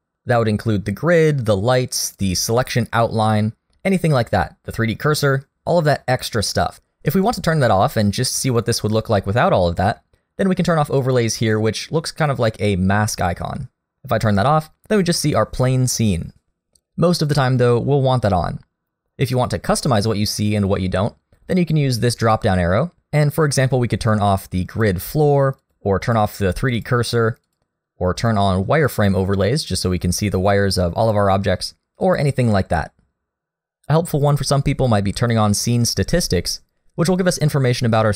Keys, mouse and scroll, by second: 2.1 click, 7.1-7.6 scroll down 2, 7.6 middle click, 13.9 click, 14.6 middle click, 18.2 click, 21.6 click.